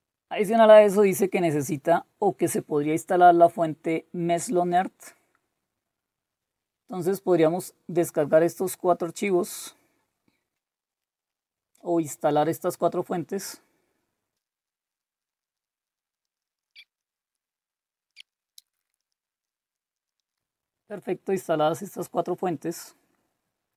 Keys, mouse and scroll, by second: 0.4-2.7 scroll up 2, 2.9-4.7 scroll down 2, 4.9-6.3 scroll down 2, 9.2 click, 9.5 click, 11.0 click, 11.2 click, 14.3 click, 14.6 click, 14.8 click, 15.1 click, 15.4 click, 15.8 click, 16.2-16.7 scroll down 2, 16.7 scroll up 2, 16.8-18.1 scroll down 6, 16.9 click, 17.3 click, 18.2 click, 18.3-19.5 typing, 19.0 click, 19.2 scroll down 1, 19.4 click, 19.7 click, 19.9 click, 20.2 click, 20.9-23.0 scroll down 1, 23.0-23.7 scroll up 1.